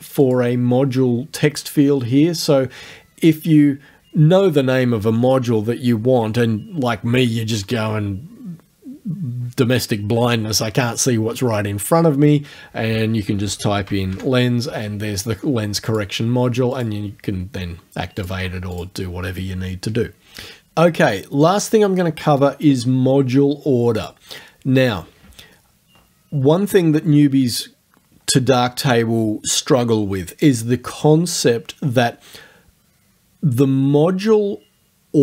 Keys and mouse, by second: 0.2 click, 13.2-14.6 typing, 15.9 click, 16.8 click, 18.2 click, 18.8 click, 24.0 click.